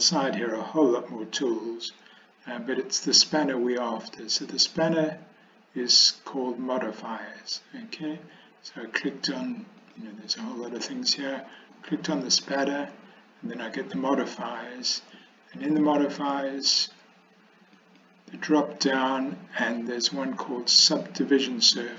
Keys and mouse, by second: 4.8 click, 11.9 click, 17.9-21.9 drag.